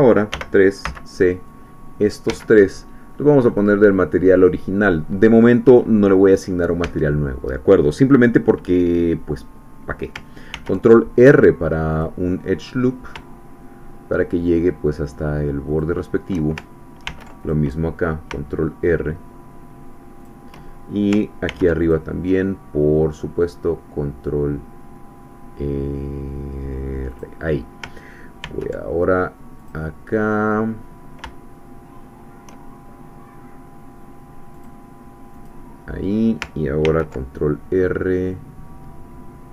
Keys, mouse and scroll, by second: 0.4 3, 0.8 c, 1.5 click, 2.3 Escape, 3.5 click, 4.3 click, 6.8 Caps_Lock, 10.5 ctrl+r, 12.0 click, 15.7 shift+click, 17.1 ctrl+r, 17.4 ctrl+click, 20.2 shift+click, 21.5 ctrl+r, 21.9 ctrl+click, 27.1 click, 28.4 ctrl+r, 29.7 click, 34.5 click, 35.5 click, 36.9 ctrl+r.